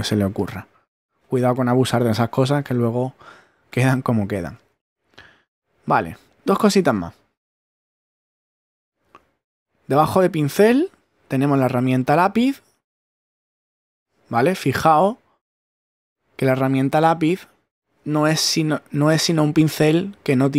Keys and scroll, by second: 18.1 super+z.